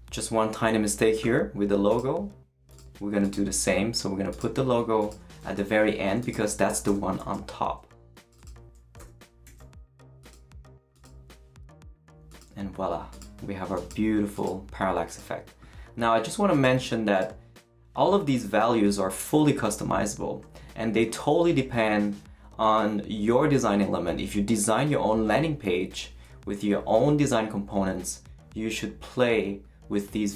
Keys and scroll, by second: 5.4 shift+super+x, 6.3 super+x, 6.9 Return, 7.2 super+v, 9.0 BackSpace, 9.4 super+s.